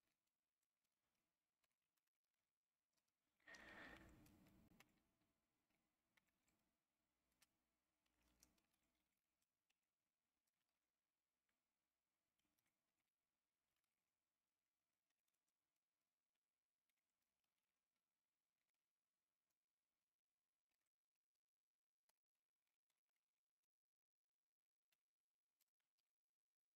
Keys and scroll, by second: 0.0-3.0 typing, 4.8-19.2 typing, 20.5-21.2 typing, 22.1 Return, 22.6-23.8 typing, 24.9-26.7 typing.